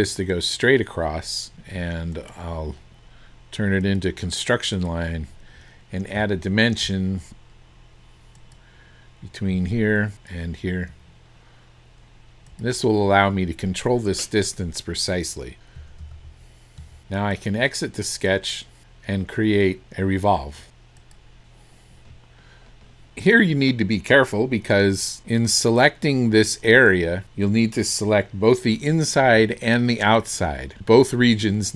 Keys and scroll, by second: 1.7 Escape, 15.8 KP_1, 16.0 KP_2, 17.0 Return.